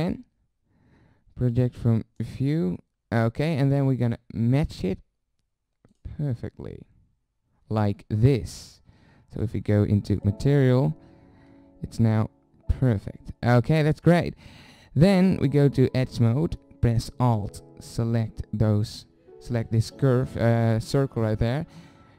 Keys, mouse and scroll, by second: 1.5 u, 4.1 s, 9.4 middle click, 10.3 click, 10.8 middle click, 15.3-18.7 drag, 21.6-22.1 drag.